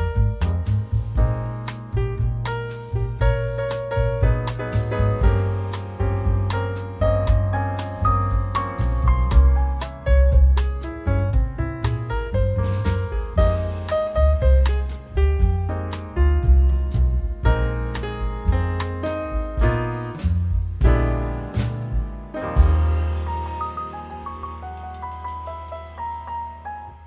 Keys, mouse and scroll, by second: 2.3-3.1 scroll up 2, 3.3-3.7 scroll down 1, 3.7-7.5 drag, 8.0 1, 8.7 scroll down 2, 9.7 2, 12.1 3, 13.2 4, 15.1 0, 16.3 scroll up 2, 17.5 scroll down 2, 18.2 scroll up 1, 19.2 scroll down 1, 22.9 click, 24.6-26.0 drag, 26.8 click.